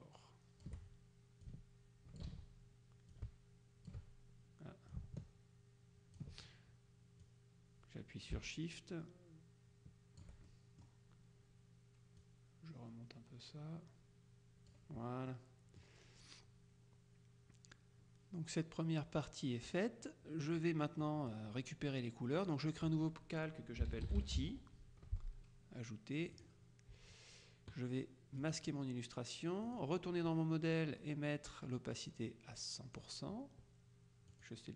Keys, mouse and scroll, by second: 1.5-2.7 ctrl+drag, 2.3 ctrl+z, 3.2-4.5 ctrl+drag, 5.0-6.7 ctrl+drag, 7.3-10.8 drag, 10.6 shift+middle click, 12.3-15.3 drag, 15.4-16.4 middle drag, 19.3 click, 21.1 click, 22.5 click, 23.7-25.0 typing, 26.5 click, 28.5 click, 29.7 click, 32.0-33.5 drag, 34.4 click.